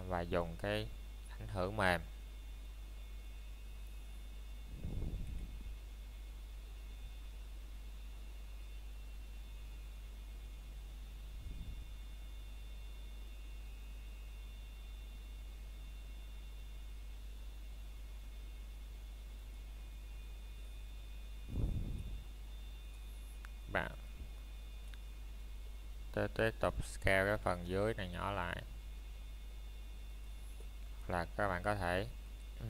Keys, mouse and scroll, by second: 0.5 s, 7.0 click, 7.8 middle click, 8.5 scroll down 1, 9.0 middle click, 9.3 scroll up 1, 9.9 shift+middle click, 10.3-11.5 scroll down 1, 11.5 click, 12.2 shift+middle click, 14.9 scroll down 1, 15.2 middle click, 16.5 o, 22.9 s, 24.9-25.7 scroll down 1.